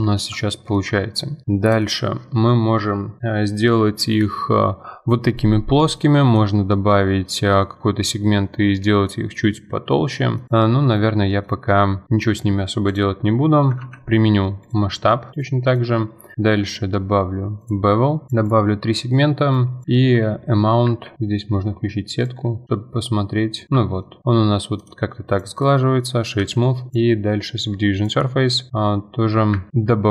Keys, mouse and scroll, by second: 0.5 Tab, 0.7-3.0 middle drag, 9.1-9.6 middle drag, 9.6-9.9 scroll down 1, 9.9-10.5 middle drag, 10.5 click, 10.7-11.2 middle drag, 11.2 scroll up 2, 11.4-12.1 middle drag, 12.1-12.9 scroll up 1, 12.9 click, 13.8 ctrl+a, 15.3 click, 15.7-20.9 drag, 20.9 F4, 21.2-21.6 scroll up 1, 22.2-24.0 shift+drag, 24.0 middle click, 24.2 scroll down 3, 24.8 right click, 25.8-26.9 middle drag, 26.9-29.3 drag, 29.5 F4, 29.7 scroll up 2, 29.8-30.1 middle drag.